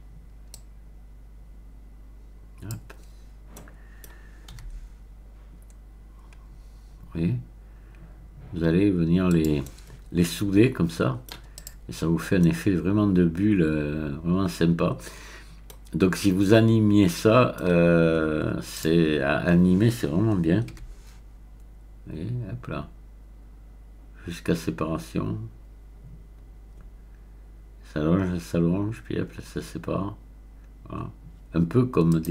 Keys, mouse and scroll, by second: 0.5-3.0 drag, 3.0-3.5 scroll up 1, 3.5-4.4 scroll up 1, 4.6 g, 4.7-6.4 middle drag, 9.3 click, 9.6-11.7 middle drag, 11.5 click, 12.0-13.0 scroll up 1, 13.0-15.8 middle drag, 15.8-16.2 scroll down 1, 16.2-17.9 middle drag, 18.7 click, 19.3-20.1 scroll down 1, 20.7 g, 32.1 click.